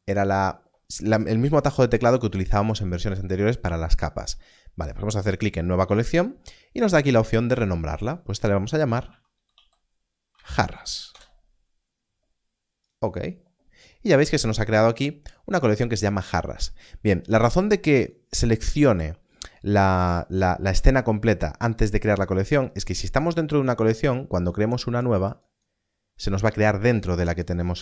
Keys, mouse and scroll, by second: 5.4 click, 8.8-10.5 typing, 11.0 Return, 14.9 click, 17.9 click, 22.8 click, 25.4 click.